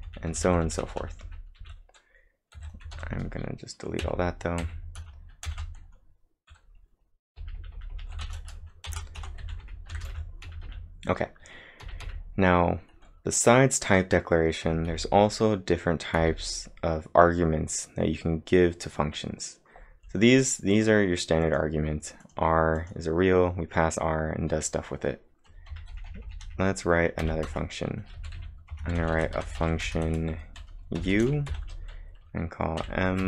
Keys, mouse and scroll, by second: 0.0-3.0 typing, 4.0 x, 5.5 shift+0, 7.2-11.9 typing, 14.1-16.2 typing, 20.7 click, 21.5 click, 22.3 click, 22.8 click, 25.5-27.2 typing, 25.7 click, 27.5 Return, 29.2-31.5 typing, 33.0-33.2 typing.